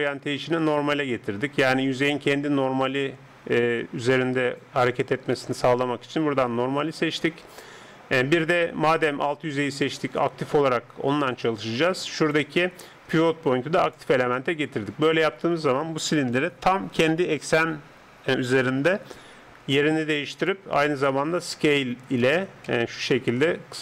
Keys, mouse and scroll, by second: 12.3-14.0 drag, 14.4-19.7 middle drag, 19.7-23.8 drag, 21.2 s.